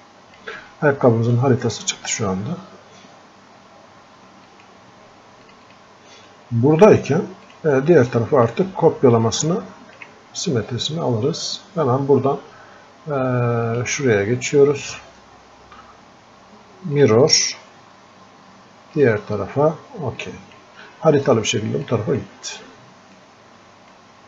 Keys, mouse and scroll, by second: 17.1-24.2 drag.